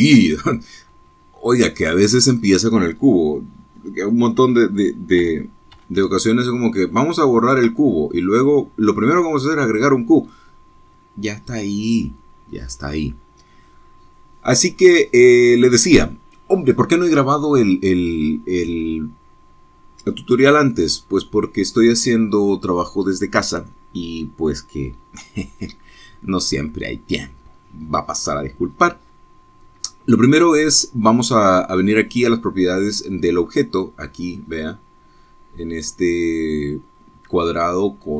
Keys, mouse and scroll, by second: 0.2-1.9 middle drag, 0.8 s, 2.8 click, 6.2 g, 6.7 z, 8.4 ctrl+click, 8.8-11.5 ctrl+middle drag, 15.7-16.1 scroll up 2, 16.1-16.4 scroll down 2, 16.6 click, 17.5-21.1 middle drag, 21.1-23.1 drag, 23.1-27.2 middle drag.